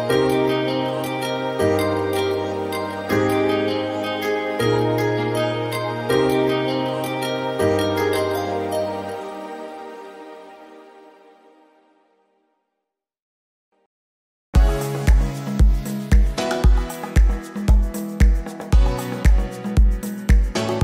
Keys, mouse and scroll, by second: 0.9 scroll down 2, 1.1 shift+middle click, 1.4 click, 1.8 g, 2.4 click, 2.7 g, 3.3 click, 3.4 g, 4.3 click, 4.4 g, 5.4-5.8 scroll up 1, 5.9 click, 6.1-8.8 typing, 7.2 click, 7.8 click, 8.5 click, 9.4-10.1 scroll up 4, 9.6 shift+middle click, 10.1 r, 10.8 shift+middle click, 11.1 click, 11.4 r, 12.2 middle click, 14.6 middle click, 14.8 click, 15.8 shift+middle click, 16.0 scroll, 16.1 shift+middle click, 16.3 click, 20.7-20.8 scroll down 1.